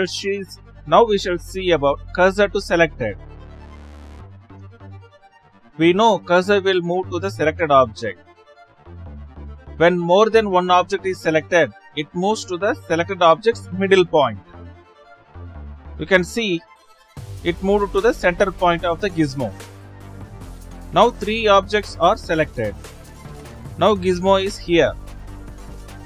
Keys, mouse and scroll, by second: 7.5 click, 8.8 shift+s, 9.9 click, 11.0 shift+s, 12.7 shift+click, 13.7-15.5 middle drag, 15.5 shift+s, 16.9 click, 17.4 click, 18.1 shift+click, 20.0 shift+s, 21.6 click, 22.7 click, 23.3 shift+click, 24.3 shift+click.